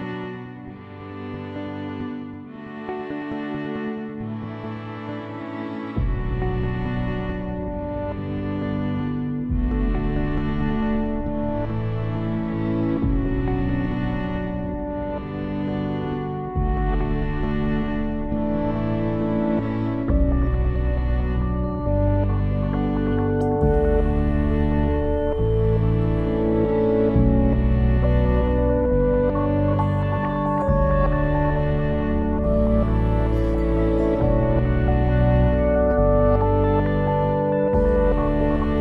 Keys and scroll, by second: 7.3 6, 7.5 Return.